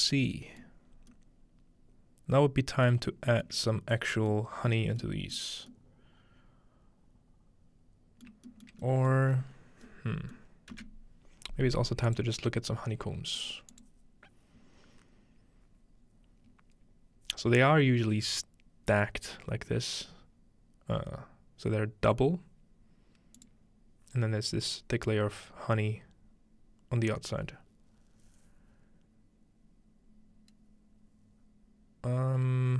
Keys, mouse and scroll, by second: 0.6 middle click, 0.9 scroll up 1, 3.0 shift+middle click, 3.4 scroll up 1, 3.6 middle click, 3.7 scroll down 1, 4.4 middle click, 5.4 middle click, 8.3 shift+middle click, 8.7 shift+middle click, 9.1 shift+middle click, 10.4-11.9 middle drag, 12.1 click, 13.4 click, 13.7 click, 23.4 click.